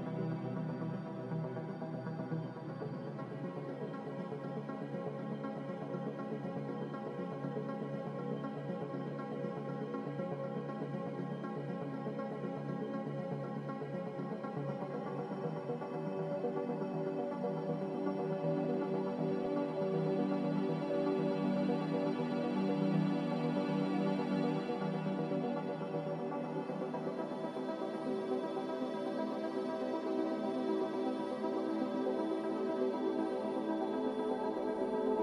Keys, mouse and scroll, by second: 7.8 ctrl+c, 8.0 ctrl+v, 14.9 Delete, 22.0 z, 25.6 Escape, 31.3 Delete.